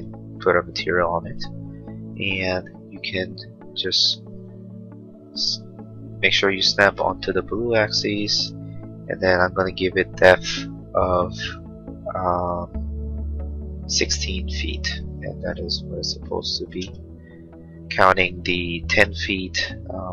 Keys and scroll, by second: 13.9 1, 14.6 6, 15.9 1, 16.8 Return.